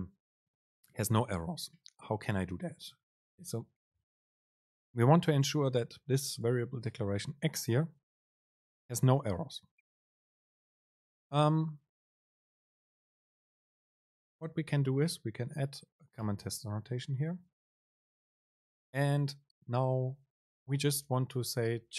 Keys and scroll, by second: 6.5 shift+Left, 10.5 Right, 10.8 Left, 18.2 super+space.